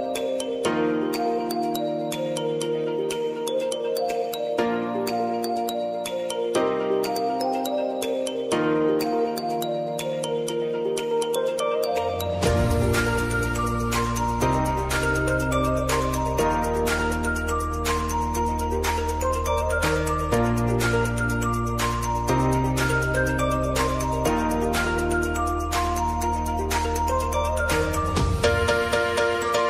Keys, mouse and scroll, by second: 4.7-9.5 shift+drag, 12.7 alt+scroll down 1, 12.8-13.9 alt+scroll up 1, 15.5 click, 16.0 ctrl+t, 16.9 click, 17.7-20.3 typing, 20.9 ctrl+a, 22.0 click, 25.6 click.